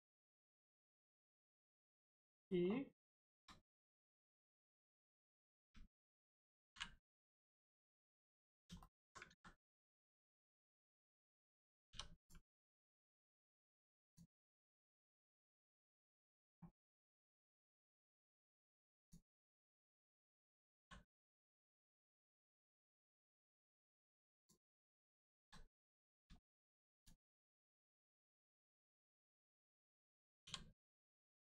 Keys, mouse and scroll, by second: 1.3-1.6 scroll down 1, 2.2 middle click, 2.6 scroll down 1, 3.1 shift+middle click, 3.9 middle click, 4.0 middle click, 4.7 shift+middle click, 5.0 click, 5.5 a, 7.7-8.4 scroll down 1, 8.7 alt+middle click, 9.1 ctrl+middle click, 9.3 ctrl+z, 9.9 scroll up 1, 10.2 click, 11.9 4, 12.1 click, 14.9 click, 15.4 shift+middle click, 16.0 click, 16.8 middle click, 18.4 click, 20.3-20.8 scroll up 1, 21.7 right click, 24.3 click, 25.3 ctrl+z, 25.7 scroll up 1, 26.3 shift+middle click, 26.9 click, 27.3 right click, 28.3 click, 30.7 right click.